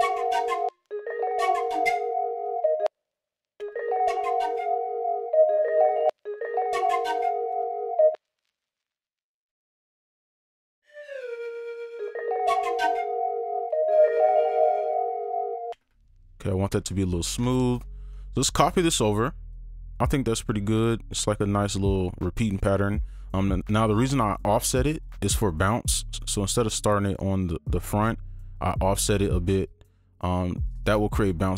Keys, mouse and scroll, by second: 0.7 space, 0.8 ctrl+Up, 2.8 ctrl+space, 3.2 alt+scroll down 1, 3.5 right click, 3.5 scroll, 3.6 space, 5.5-6.1 alt+scroll up 1, 6.1 space, 7.8 right click, 8.1 space, 12.0 space, 15.3 click, 15.7 alt+space, 16.3 alt+click, 18.3 ctrl+s, 18.4 ctrl+a, 19.5 shift+click, 22.5 right click, 23.9 double click, 24.3 right click, 25.0 double click, 29.6 double click, 30.8 right click.